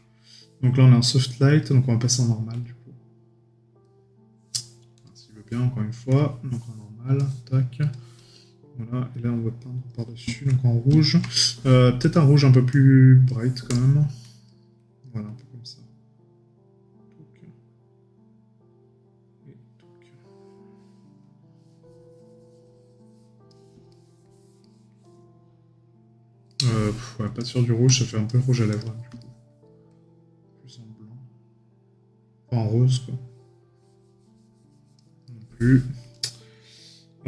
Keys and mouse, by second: 11.2 right click, 23.9 right click, 26.5 right click, 29.2 right click, 35.2 right click.